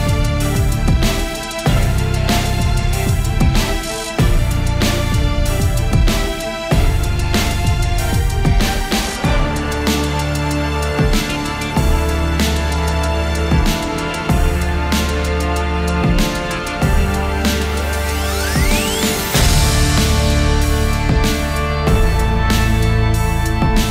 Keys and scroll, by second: 7.9 typing, 10.6 b, 11.5 space, 22.7-23.9 typing.